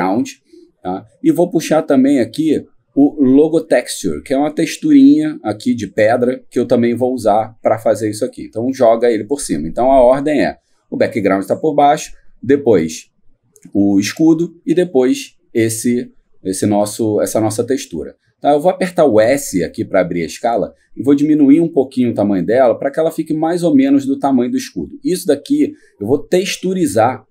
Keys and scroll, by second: 18.9 s.